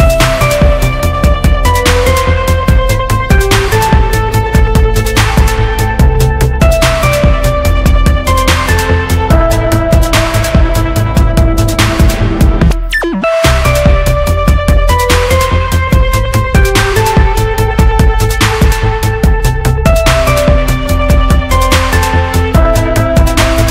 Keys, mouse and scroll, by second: 8.1 typing, 9.0 middle click, 15.1 r, 15.4 e, 20.1 e.